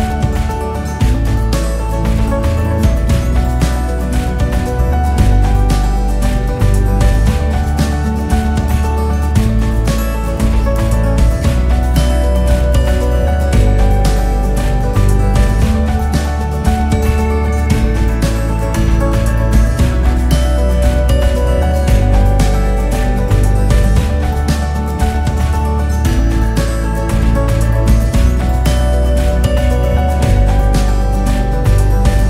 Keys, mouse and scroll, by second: 0.0 click, 0.4 scroll up 2, 1.6 Tab, 2.0-2.3 scroll down 2, 2.7 KP_7, 2.8 KP_7, 3.5 KP_2, 3.6-4.2 KP_2, 4.4-4.8 drag, 5.6 KP_8, 5.7 KP_8, 6.0 KP_8, 6.9 g, 10.0 KP_6, 10.1 KP_6, 10.7 KP_1, 12.1 g, 15.8 s, 18.3 g, 24.8-25.2 drag, 25.6 scroll up 5, 26.0-26.8 scroll down 2, 26.8 KP_6, 26.9-27.5 KP_6, 27.8 KP_3, 30.1 click, 30.9 g.